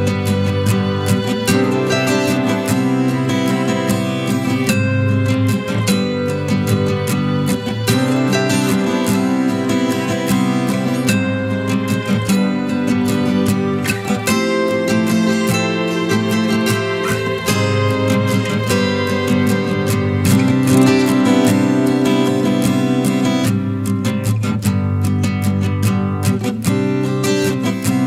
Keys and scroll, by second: 8.1 ctrl+KP_Add, 9.1 ctrl+t.